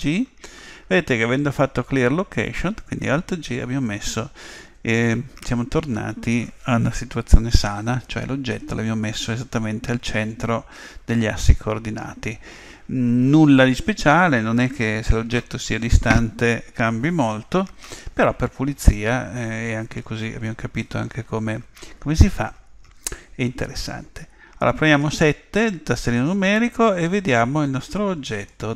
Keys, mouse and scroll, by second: 25.4 KP_7.